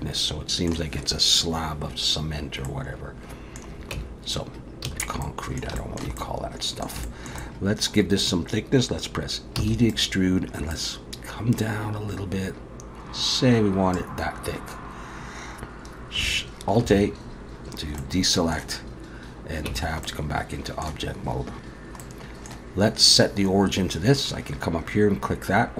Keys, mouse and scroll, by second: 2.7 middle click, 3.9 Tab, 4.9 a, 5.2 middle click, 5.8 shift+middle click, 6.2 middle click, 7.1 shift+middle click, 7.4 middle click, 9.6 e, 10.7 click, 16.8 alt+a, 18.0 middle click, 19.7 Tab, 20.1 middle click, 22.0 middle click.